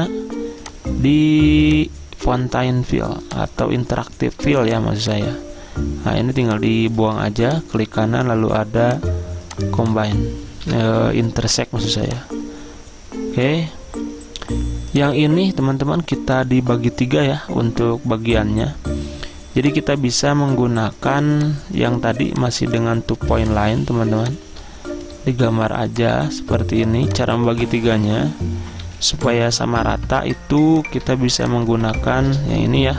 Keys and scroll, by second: 10.8 Delete, 28.9 z.